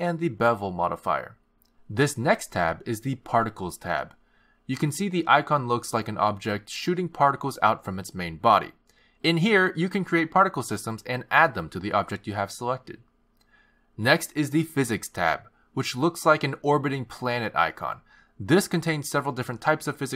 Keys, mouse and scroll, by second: 0.7 click, 1.1 click, 2.6 click, 5.4 click, 10.6 click, 15.9 click.